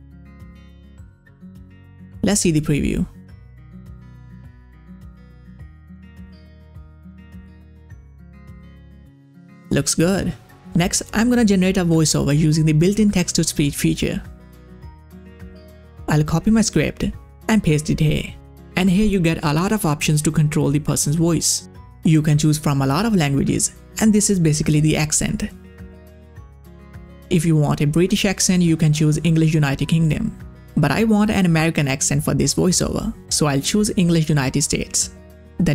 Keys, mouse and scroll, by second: 1.9-4.1 drag, 4.1 space, 8.6 space, 8.7 click, 11.4 middle click, 16.0 click, 17.0 ctrl+a, 17.6 ctrl+c, 18.2 click, 21.9 ctrl+v, 22.8-24.0 scroll down 1.